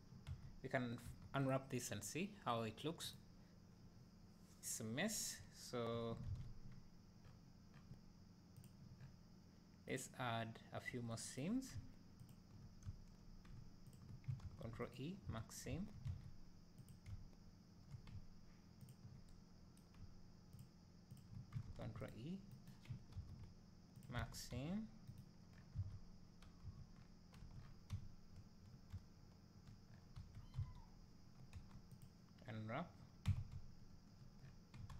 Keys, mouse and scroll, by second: 0.3 a, 3.3-3.8 drag, 4.8 scroll up 2, 5.4 `, 5.5 middle click, 6.3 alt+a, 7.2 scroll down 1, 8.5 drag, 8.9 scroll up 1, 10.0 click, 11.2 middle click, 11.3 right click, 12.9 `, 14.0 ctrl+click, 15.0 ctrl+e, 15.3 a, 16.2 alt+a, 16.9 click, 18.9 ctrl+click, 20.6 ctrl+click, 22.1 ctrl+e, 24.2 alt+a, 25.6-29.9 right drag, 25.6 scroll down 1, 25.8 alt+a, 27.4 scroll up 1, 27.7 scroll down 1, 27.9 `, 29.9 scroll up 1, 31.0 a, 32.1 u, 32.6 scroll down 1, 33.3 Tab, 33.5 `, 34.4 scroll up 1.